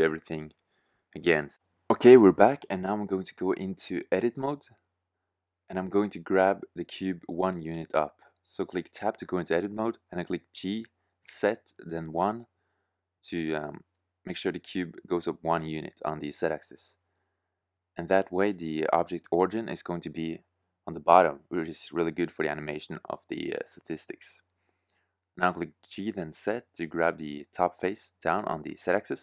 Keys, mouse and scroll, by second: 3.9 middle click, 7.5 Tab, 9.3 g, 12.1 click, 16.8 middle click, 20.9-24.5 middle drag, 23.9 g.